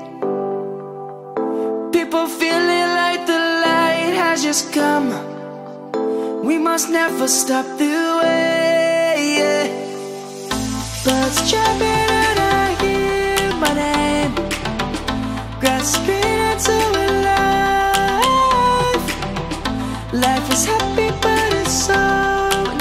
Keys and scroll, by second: 3.9 ctrl+z, 4.3 ctrl+s, 4.5 ctrl+s, 12.7 ctrl+z, 16.9 ctrl+s, 18.0 ctrl+z, 19.3 ctrl+z, 20.2 ctrl+z, 20.6 ctrl+z, 22.1 ctrl+z, 22.4 ctrl+z, 22.6 ctrl+z.